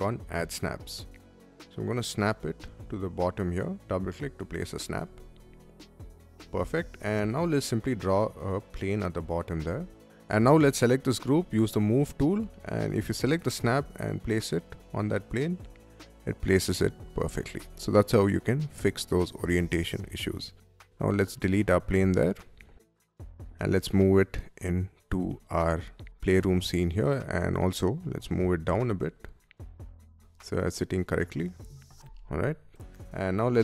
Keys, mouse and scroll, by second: 0.0 click, 0.4 middle click, 1.8 middle click, 2.7 click, 2.8 click, 3.5 middle click, 4.1 middle click, 4.6 space, 5.5 Escape, 5.5 middle click, 5.9 Escape, 6.2 Escape, 7.1 r, 8.4 middle click, 9.3 space, 9.5 click, 10.2 click, 10.6 middle click, 11.2 m, 12.6 click, 13.0 click, 15.5 click, 15.8 middle click, 17.1 space, 17.3 click, 18.0 middle click, 19.8 click, 20.0 click, 20.7 Delete, 21.7 middle click, 22.3 click, 22.7 m, 23.1 click, 25.8-27.6 shift+middle drag, 27.7 shift+click, 28.3 Up, 29.2 click, 29.5 click, 29.7 Up, 30.9 click, 31.2 scroll up 1, 31.7 Up, 31.7 middle click, 31.8 space, 32.0 middle click, 33.5 Escape.